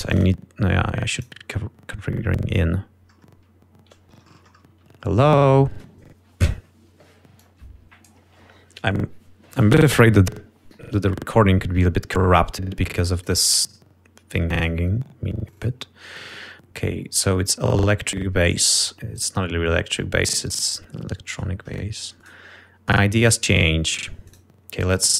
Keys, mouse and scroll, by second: 0.4 click, 1.3 click, 7.0 click, 12.5 click, 13.7 click, 14.5 click, 17.3-18.4 drag, 18.9 click.